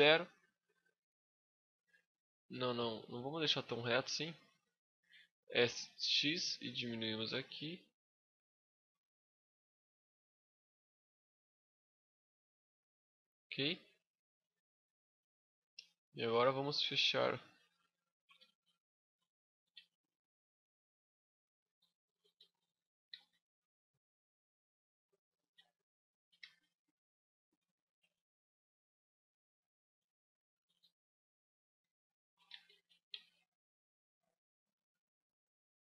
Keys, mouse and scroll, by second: 3.3 scroll down 2, 3.6 middle click, 4.4 click, 5.3 s, 8.7 middle click, 11.5 click, 12.9 middle click, 13.9 scroll up 1, 14.0 middle click, 17.2 right click, 17.8 shift+right click, 18.2 f, 18.7 right click, 19.3 shift+right click, 19.5 f, 20.0 shift+middle click, 21.3 right click, 21.8 shift+right click, 22.9 f, 23.1 middle click, 24.2 right click, 25.2 right click, 25.7 shift+right click, 25.8 shift+right click, 26.2 f, 26.5 middle click, 27.1-27.5 scroll up 3, 27.5 shift+middle click, 28.5 right click, 28.8 scroll down 2, 29.0 middle click, 30.2 shift+right click, 30.7 f, 32.0 shift+right click, 32.3 f, 32.5 a, 32.7-33.0 scroll down 6, 32.9 Tab, 33.0 scroll up 1, 33.1 middle click.